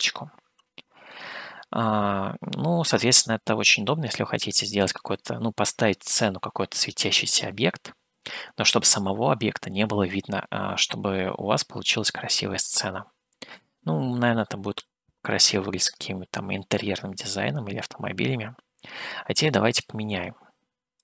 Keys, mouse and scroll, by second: 1.3-3.1 middle drag, 11.6-13.7 middle drag, 20.1 click.